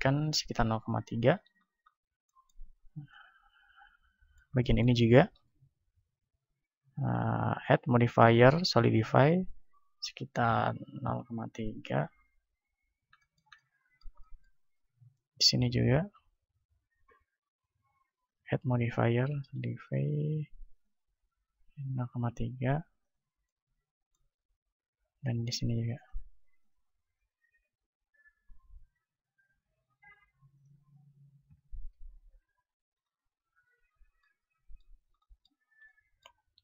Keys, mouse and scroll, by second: 1.6-5.2 middle drag, 5.2-7.1 right drag, 7.1 click, 8.9-12.1 drag, 12.7-14.7 middle drag, 14.7-18.3 right drag, 19.3-23.0 drag, 23.4-24.7 middle drag, 24.7-25.7 drag, 28.5-32.9 drag, 33.2-36.6 middle drag, 33.8 a.